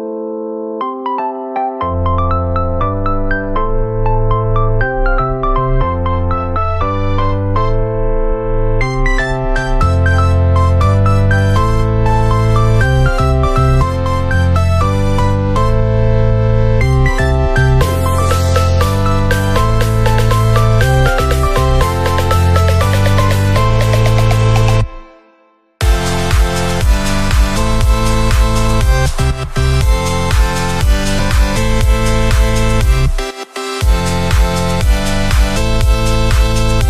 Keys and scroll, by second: 7.9 ctrl+0, 33.3 ctrl+=.